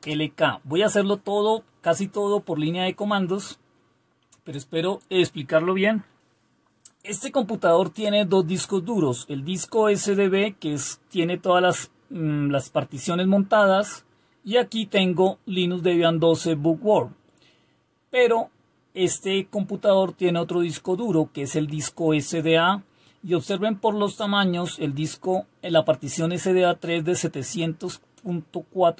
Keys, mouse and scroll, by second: 0.0 typing.